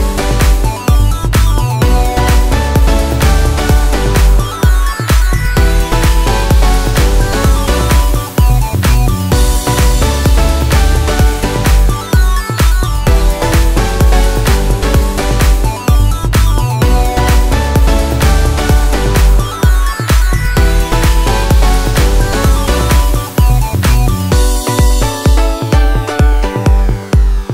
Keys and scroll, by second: 2.8 Escape, 4.1 m, 4.1 space, 5.4-6.2 typing, 8.6 space, 9.9 2, 10.3 0, 10.6 Return, 10.9 Escape, 12.8 m, 12.9 space, 14.9-15.7 typing, 16.6 Escape.